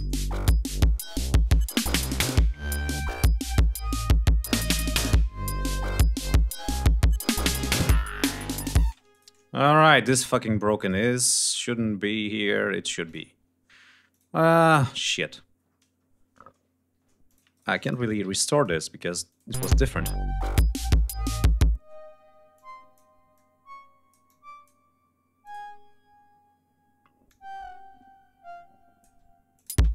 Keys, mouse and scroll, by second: 0.4 ctrl+scroll down 2, 0.7 ctrl+scroll up 2, 3.4 ctrl+scroll down 2, 3.7 ctrl+scroll up 2, 4.3 ctrl+g, 5.1-5.7 ctrl+scroll down 4, 5.8 scroll up 2, 7.4 click, 8.0 click, 8.6 space, 8.9 click, 9.7 click, 10.5 click, 12.8 click, 13.8 ctrl+click, 14.2 click, 14.6 scroll up 2, 14.9-15.2 scroll down 2, 15.3-15.6 scroll up 2, 15.7 scroll down 2, 17.0-17.5 shift+drag, 17.3 shift+right click, 17.7-18.6 ctrl+shift+drag, 19.0 click, 19.3 space, 19.5 ctrl+scroll up 2, 20.3 e, 21.5 space, 22.3 click, 23.1-24.6 drag, 25.2 click, 27.0-29.0 drag, 29.3 click, 29.5 space.